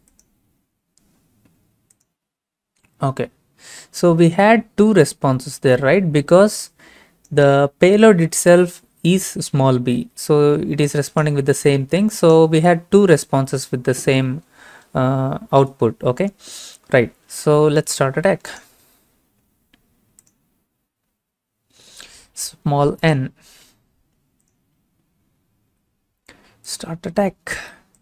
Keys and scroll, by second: 25.7 n.